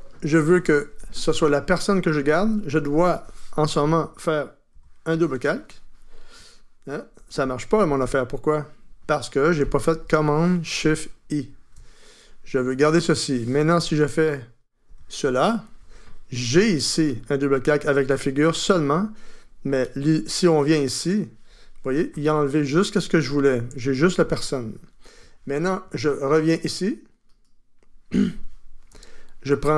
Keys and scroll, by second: 4.7 super+j, 7.9 super+z, 11.4 shift+super+i, 14.9 super+j.